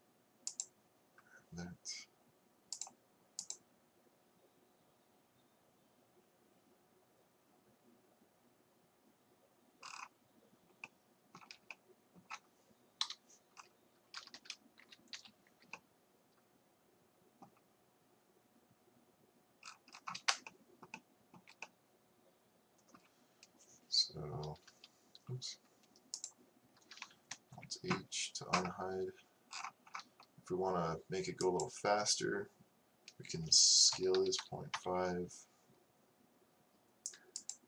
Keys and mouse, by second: 1.5-2.5 drag, 2.8-5.5 drag, 13.1 KP_5, 14.2 a, 14.4 a, 15.2 h, 24.5 a, 24.7 a, 27.4 alt+h, 31.6-34.3 drag, 37.5-37.6 drag.